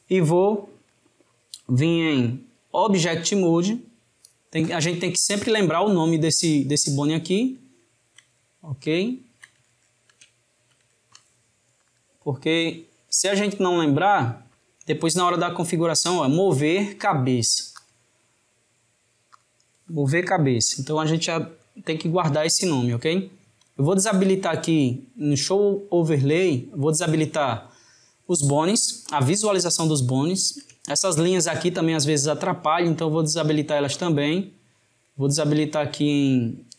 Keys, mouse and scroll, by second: 2.2-5.3 drag, 7.7-11.8 ctrl+middle drag, 11.8-14.9 drag, 17.8-20.8 drag, 23.6-25.6 shift+middle drag, 25.6-28.6 drag, 30.1-33.3 shift+middle drag, 33.3-36.3 drag.